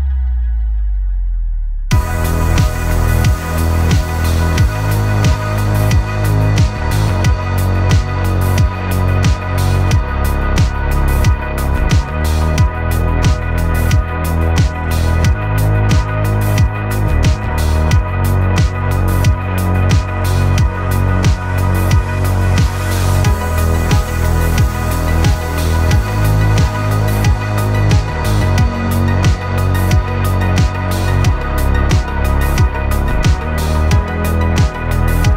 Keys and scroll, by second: 6.8 v, 19.2 v.